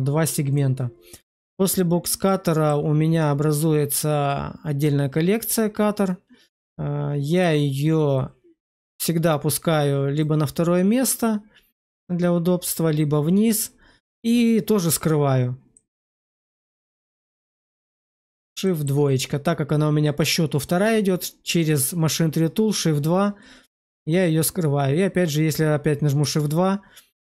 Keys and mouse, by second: 0.4 click, 2.2 middle click, 7.2 click, 15.6-16.2 middle drag, 16.3 shift+middle click, 17.7 shift+2, 18.5 shift+middle drag, 26.1 shift+2.